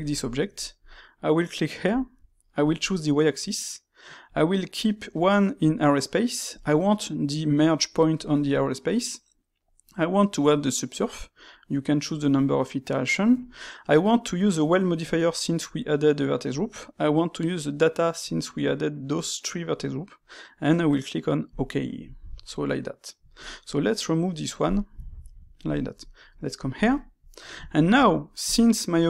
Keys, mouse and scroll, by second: 1.8-4.8 drag, 22.2-23.3 shift+middle drag, 23.3 click, 24.6 click, 25.0-26.6 shift+middle drag, 26.6 click, 26.9-28.4 shift+middle drag, 28.4 click.